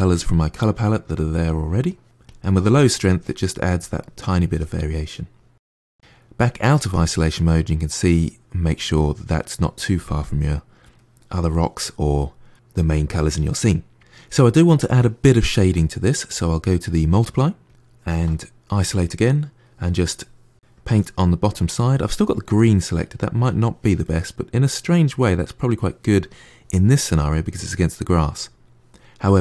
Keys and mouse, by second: 1.5 click, 1.8 middle click, 2.1 click, 2.2 middle click, 2.6 middle click, 3.0 click, 3.0 middle click, 3.4 click, 3.5 middle click, 3.8-5.1 drag, 5.1 KP_Divide, 6.6-12.5 middle drag, 13.8 middle click, 16.7-17.8 drag, 17.8 middle click, 18.6 KP_Divide, 19.1 middle click, 19.8-23.9 drag, 23.9-26.9 middle drag.